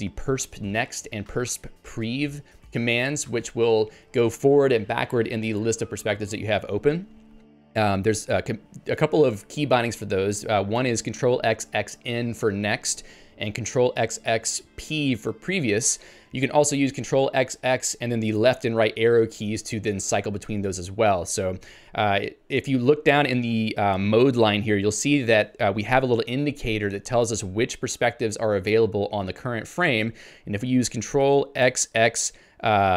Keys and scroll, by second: 23.0 Return.